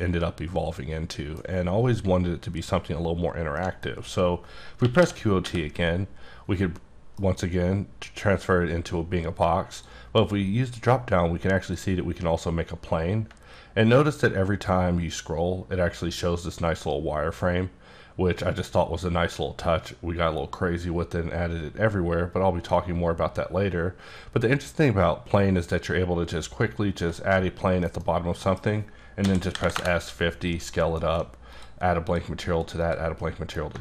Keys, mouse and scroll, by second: 3.6 middle click, 4.8 q, 5.0 o, 5.4 t, 7.2 F9, 9.7 click, 11.6 click, 13.9-14.6 ctrl+scroll down 2, 14.6-15.1 ctrl+scroll down 1, 15.1-16.9 ctrl+scroll down 3, 16.9-17.4 ctrl+scroll down 1, 17.6-18.2 ctrl+scroll down 2, 19.0-19.6 ctrl+scroll down 2, 19.6-20.1 ctrl+scroll down 1, 20.1-22.0 ctrl+scroll down 1, 22.0-22.5 ctrl+scroll down 2, 22.5-23.4 ctrl+scroll up 1, 23.4-23.9 ctrl+scroll up 1, 23.9-24.5 ctrl+scroll up 1, 24.5-25.6 ctrl+scroll up 2, 25.6-26.6 ctrl+scroll up 3, 26.6-27.2 ctrl+scroll down 1, 27.2-27.8 scroll down 1, 27.8 middle click, 28.1 scroll down 1, 28.4 middle click, 29.2 s, 29.5 KP_5, 29.7 KP_Enter, 31.0 alt+m, 31.5 click, 32.1 click, 32.4 alt+m, 32.8 click, 33.2 middle click.